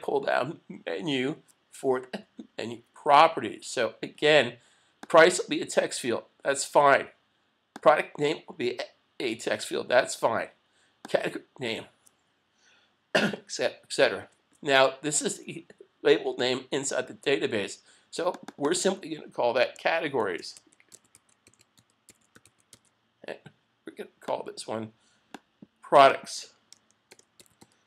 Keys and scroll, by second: 20.2 shift+c, 27.1 shift+p.